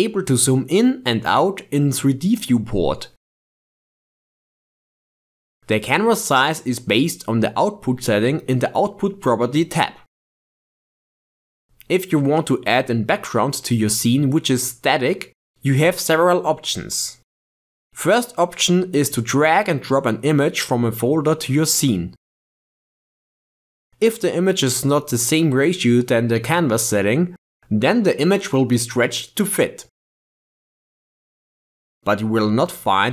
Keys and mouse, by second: 0.9 middle click, 1.9-4.2 middle drag, 1.9 KP_0, 8.7-11.6 drag, 21.0-22.3 ctrl+middle drag.